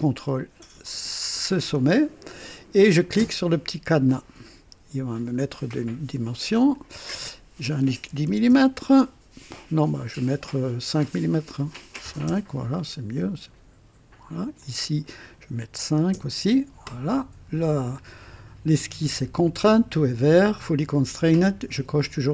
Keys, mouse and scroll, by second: 0.8 click, 4.0 click, 5.1 scroll down 1, 6.5 click, 8.0 KP_1, 8.1 KP_1, 8.2 KP_0, 8.5 KP_Enter, 10.2 click, 10.2-12.3 typing, 11.0 click, 12.3 KP_Enter, 14.4 click, 14.4 typing, 15.8 typing, 16.1 KP_Enter.